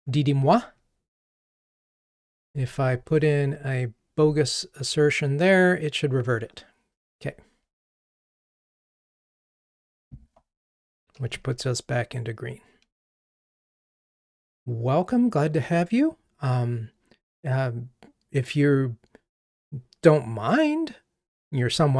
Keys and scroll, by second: 3.1 super+v, 11.5 ctrl+r.